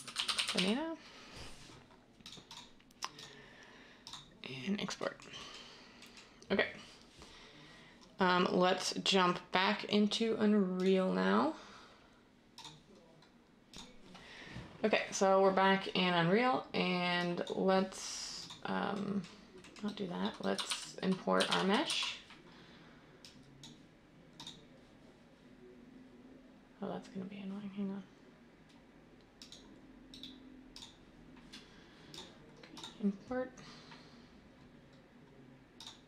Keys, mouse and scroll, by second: 20.6-21.8 typing.